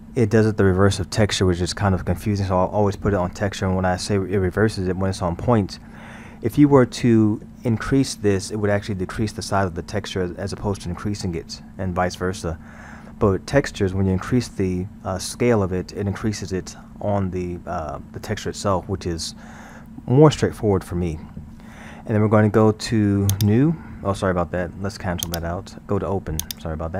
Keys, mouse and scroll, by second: 2.8-8.8 middle drag, 12.7-15.6 middle drag, 21.6-23.3 middle drag, 23.3-25.4 drag, 26.4 click.